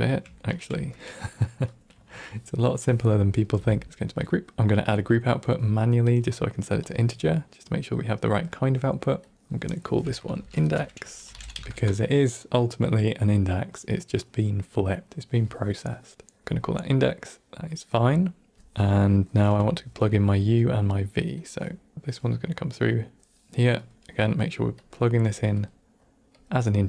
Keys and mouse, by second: 0.3 ctrl+middle click, 0.9 middle click, 1.6 click, 1.9 typing, 2.6-3.3 drag, 3.4 g, 3.8 n, 4.8 click, 6.0-6.8 drag, 7.8-8.3 drag, 9.2 click, 9.3 click, 16.7-17.6 drag, 18.5 click, 18.5 a, 18.5 g, 19.2 middle click, 19.7 ctrl+middle click, 20.2 middle click, 21.3-22.8 drag, 23.7 click, 24.7-25.3 drag, 25.5-26.3 drag.